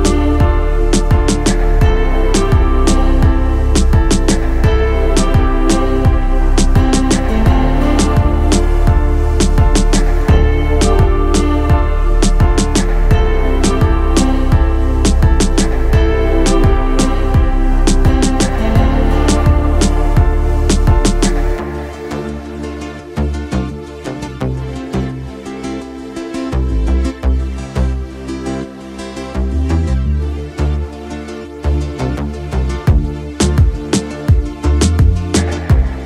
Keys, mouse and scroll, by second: 2.9 shift+middle click, 3.3-11.0 middle drag, 11.3 shift+middle click, 11.6 middle click, 12.7 shift+middle click, 14.1-33.0 drag, 33.5-34.7 middle drag, 35.5-36.0 middle drag.